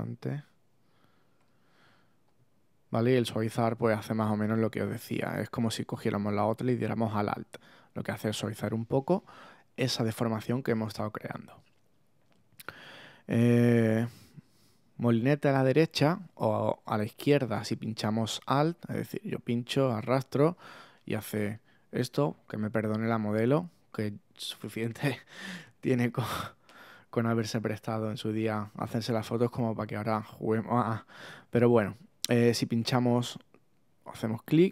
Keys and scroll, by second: 22.0 super+z.